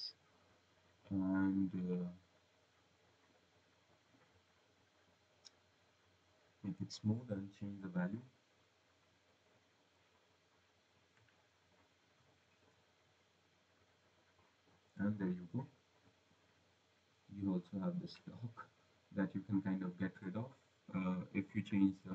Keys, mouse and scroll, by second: 1.0 click, 2.9 click, 3.8 click, 5.4 click, 5.8 click, 6.3 click, 8.1 click, 11.3 click, 13.3 right click, 14.7 click, 21.1 click.